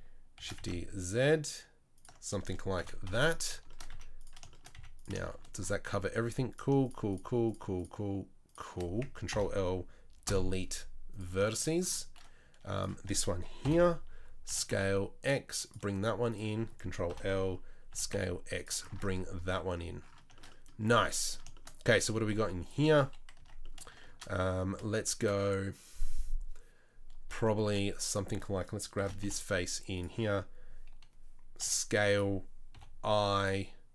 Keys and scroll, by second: 0.4 shift+d, 2.8 KP_3, 3.1 KP_1, 3.9 z, 4.8 z, 9.3 ctrl+l, 10.3 Delete, 13.7 ctrl+l, 14.5 s, 17.1 ctrl+l, 17.9 s, 18.9 Tab, 22.4 2, 23.4 Tab, 27.7 3, 29.0 shift+d, 31.6 s, 32.8 i.